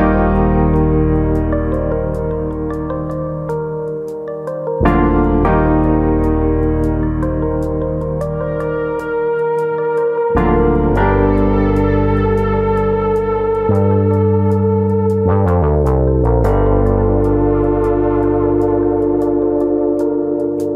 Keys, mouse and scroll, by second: 0.6 click, 2.6 click, 3.7 middle click, 4.2 shift+middle click, 4.4 middle click, 4.7 middle click, 5.5 shift+middle click, 5.5 click, 5.7 middle click, 6.2 click, 6.4 middle click, 6.8 middle click, 6.8 click, 7.9 middle click, 8.2-8.9 scroll down 3, 8.4 middle click, 9.7-10.4 scroll up 3, 9.9 middle click, 10.4 middle click, 11.9 shift+click, 12.7 click, 13.9 shift+click, 14.5 click, 15.6 middle click, 16.0-16.4 scroll up 3, 16.2 middle click, 16.5 shift+middle click, 16.8 middle click, 17.4 click, 20.0 shift+click.